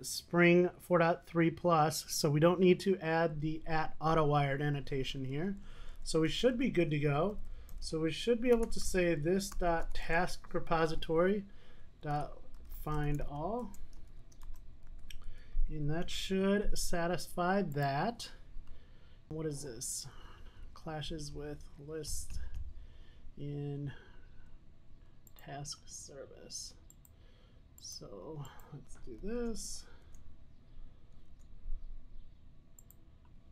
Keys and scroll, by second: 9.7 super+z, 12.6 Return, 19.4 super+s, 29.4 alt+Return, 29.5 alt+Return.